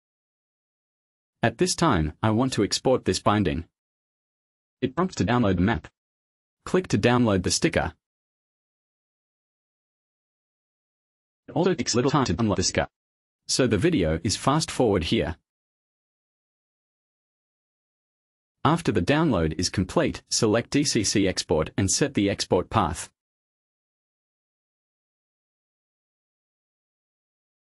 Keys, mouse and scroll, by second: 0.5 click, 1.6 click, 2.1 click, 4.6 click, 5.5 click, 6.0 click, 9.7 click, 22.0 click, 22.4 click, 24.1 click, 25.3 click, 27.3 click.